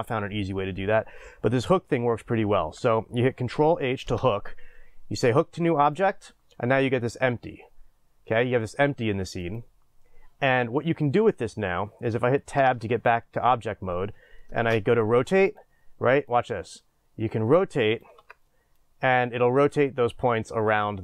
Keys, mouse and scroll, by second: 6.1 ctrl+h, 12.6 Tab, 15.6 shift+space, 16.3-21.0 drag, 18.2 ctrl+z.